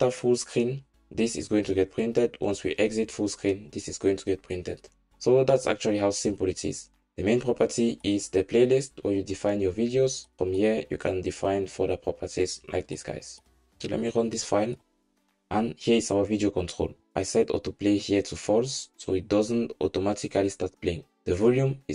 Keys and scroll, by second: 14.8 ctrl+shift+r.